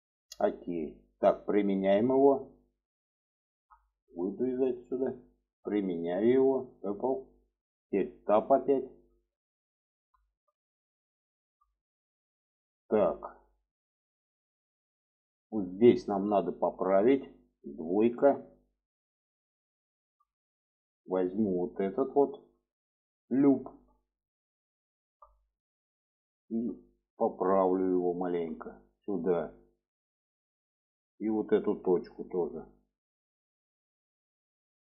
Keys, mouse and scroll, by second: 1.6-2.6 drag, 2.8 middle click, 3.3 Tab, 4.0 shift+middle drag, 5.8-6.5 drag, 7.0 middle click, 8.2 Tab, 8.8 alt+middle click, 10.0 shift+middle click, 11.1 shift+middle click, 13.8 shift+middle click, 15.1 shift+middle click, 16.2 shift+middle click, 18.0 2, 18.5 middle click, 20.1 middle click, 20.5 middle click, 21.2 shift+middle click, 23.2 alt+shift+click, 23.9 middle click, 25.3 alt+middle click, 26.2 shift+middle click, 27.0 shift+middle click, 27.9 shift+middle click, 28.9-30.7 drag, 31.6 1, 32.3 click, 32.8-34.5 drag.